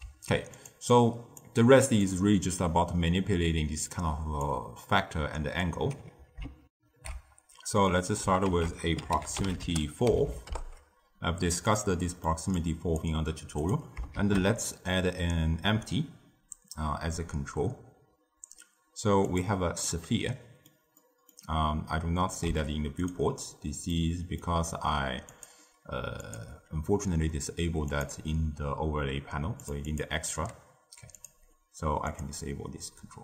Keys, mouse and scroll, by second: 0.5 click, 0.8 click, 1.9-4.9 drag, 6.6 ctrl+alt+shift+w, 8.4 ctrl+a, 10.2 Down, 11.9 middle click, 12.5 click, 13.5 click, 14.1 shift+a, 19.8-22.5 middle drag, 22.5 s, 23.8-25.2 middle drag, 25.2-30.9 drag, 31.1 click, 32.0 click.